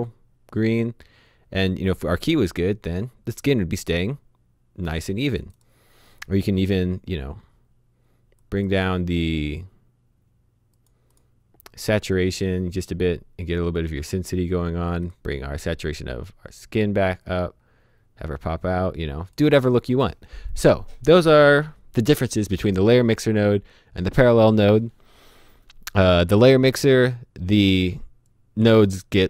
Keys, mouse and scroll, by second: 8.4 click, 17.2 click, 27.0 click.